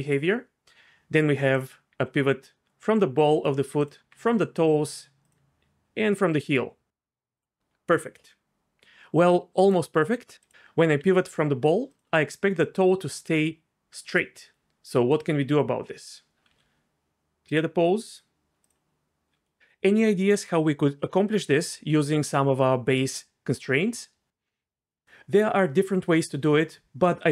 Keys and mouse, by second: 1.9 r, 3.4 right click, 3.8 click, 4.0 r, 4.7 right click, 6.2 r, 7.4 right click, 9.6 click, 10.4 click, 10.5 r, 11.0 r, 12.5-14.6 d, 14.5 right click, 16.5 a, 17.6-18.7 drag, 24.6 click.